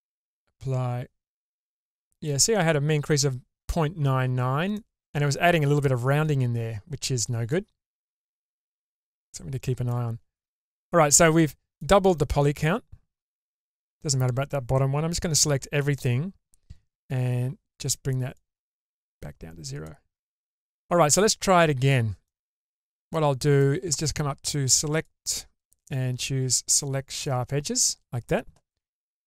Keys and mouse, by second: 0.7 Tab, 1.8 Tab, 4.8 middle click, 6.0-7.6 middle drag, 8.5-9.9 middle drag, 10.2 Tab, 11.4 middle click, 15.3 a, 18.4 click, 21.1 middle click, 22.2 shift+middle click, 23.1 middle click, 25.0 click, 25.7-27.2 drag.